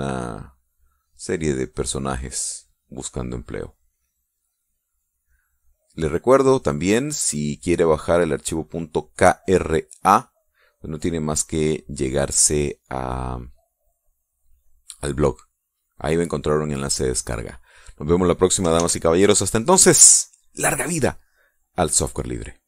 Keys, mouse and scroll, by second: 0.0 click, 0.5 click, 0.9 click, 2.4 click, 3.3 click, 4.4 click, 5.4 click, 6.8 click, 7.4 click, 8.6 click, 9.0 click, 9.4 click, 12.1 middle click, 17.0 middle click, 18.0-19.2 middle drag, 19.9 ctrl+s.